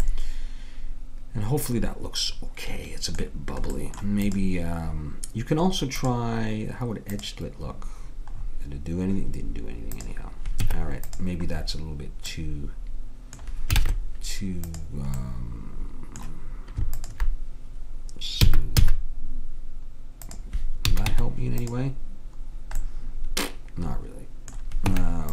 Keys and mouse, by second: 2.3-3.8 middle drag, 4.3-7.8 drag, 10.0 click, 10.7 Tab, 13.8 ctrl+Tab, 17.0-18.8 drag, 18.5 s, 20.9 a, 21.1 Tab, 24.9 Tab.